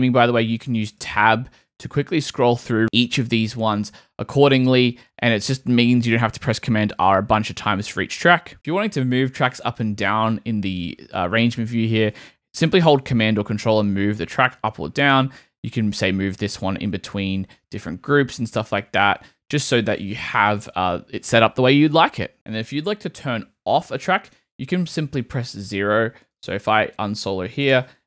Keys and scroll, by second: 0.2 Tab, 3.9 Tab, 13.6 super+Up, 24.3 0.